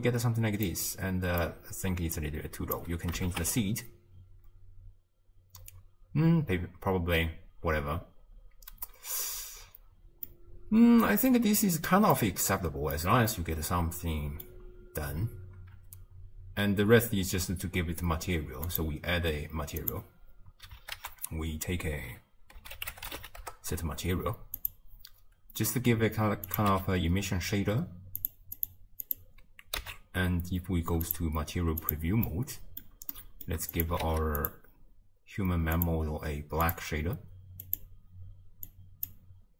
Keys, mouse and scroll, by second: 0.2 space, 0.7-2.3 middle drag, 2.3-3.3 drag, 3.3 shift+space, 10.3-11.5 middle drag, 11.5-12.2 scroll down 1, 12.2-15.8 middle drag, 15.8 space, 20.0-23.4 drag, 23.4 ctrl+a, 26.7-28.3 drag, 28.9-31.4 drag, 31.4 z, 31.9 click, 32.4-33.9 middle drag, 33.9 click, 34.1 shift+d, 35.9-38.7 drag.